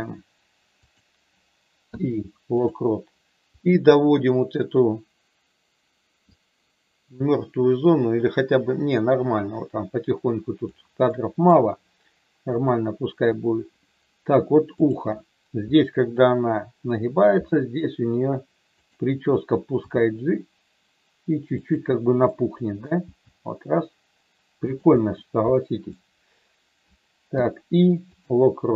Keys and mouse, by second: 1.8 i, 3.6 click, 6.3-10.6 drag, 11.1 middle click, 12.6 click, 14.8 click, 17.3 r, 18.7 click, 19.8 g, 22.3 middle click, 23.1 g, 24.9 middle click, 27.2 i.